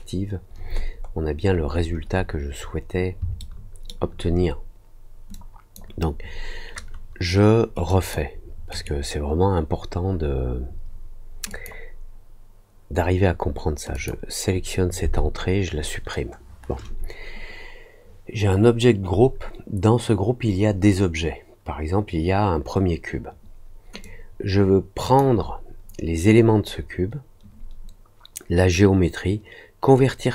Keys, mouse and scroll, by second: 0.8 scroll up 1, 1.4-2.1 scroll up 6, 2.6 scroll down 2, 3.3 alt+middle click, 5.3-5.7 drag, 7.8 click, 8.6 right click, 11.4 click, 13.9 click, 24.0-25.1 drag.